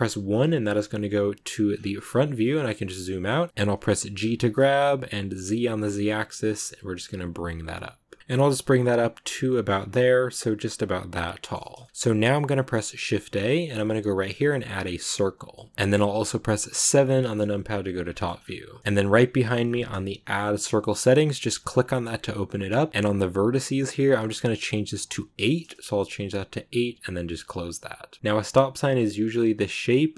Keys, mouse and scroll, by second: 0.2 KP_1, 1.6-2.0 scroll down 12, 2.3 shift+middle click, 2.5 scroll down 2, 2.7 shift+middle click, 3.0-3.5 scroll up 1, 3.5 g, 4.1 g, 10.2-11.6 middle drag, 11.6 scroll up 2, 11.7 shift+middle click, 15.0 shift+a, 15.4-16.8 middle drag, 16.8 KP_7, 18.0 shift+middle click, 18.2-19.4 scroll up 3, 28.1 ctrl+z.